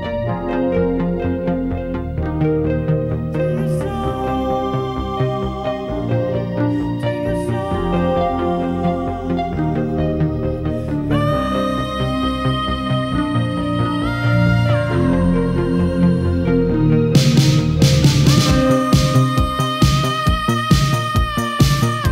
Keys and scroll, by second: 1.9 w, 3.3-3.7 typing, 11.3 alt+f, 19.7 w.